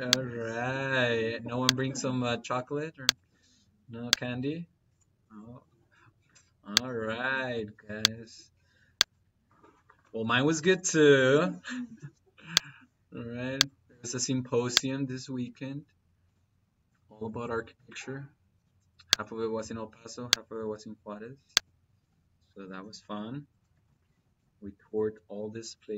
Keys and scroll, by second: 5.5 -, 11.8 -, 18.4 -.